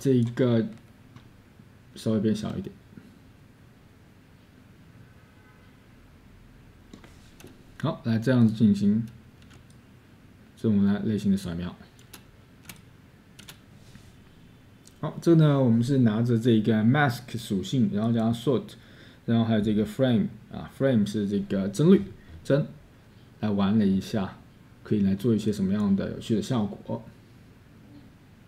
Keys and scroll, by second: 10.4-12.1 scroll.